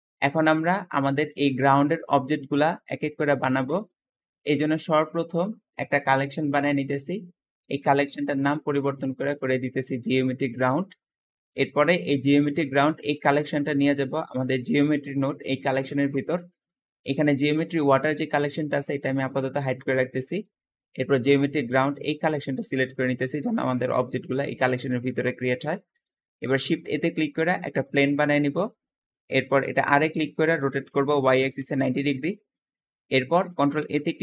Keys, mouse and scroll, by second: 0.0 shift+middle click, 0.5-3.9 shift+middle drag, 0.7 `, 1.3 click, 3.9 Escape, 5.8-7.0 drag, 7.1-10.2 ctrl+drag, 7.5 ctrl+v, 8.0 Return, 11.5 click, 16.4 click, 19.3 click, 20.7 click, 25.4-26.5 middle drag, 26.5 shift+a, 27.9 scroll down 2, 28.3-29.9 middle drag, 29.9 r, 30.5 KP_9, 30.6 KP_0, 30.9 y, 31.4 Return, 32.1-32.5 scroll down 5, 32.5-33.6 shift+middle drag, 33.6 ctrl+a.